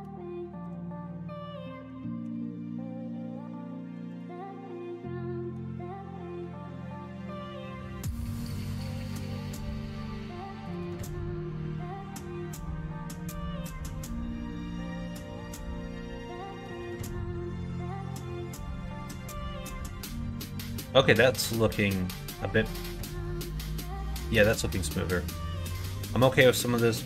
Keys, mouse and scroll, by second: 2.2 s, 4.3-5.6 middle drag, 5.7 middle click, 6.8 alt+click, 7.7 3, 8.2 alt+click, 9.1 2, 9.8 shift+click, 10.4 shift+click, 10.8 middle click, 11.3 s, 13.2-14.3 middle drag, 14.9 alt+h, 15.5 click, 15.8 Tab, 16.1 click, 16.7 middle click, 17.3 middle click, 18.5 /, 18.8 click, 19.3-20.6 middle drag, 21.0 middle click, 21.6 middle click, 22.5 middle click, 23.4 middle click, 24.0 middle click, 24.4 middle click, 24.9 middle click.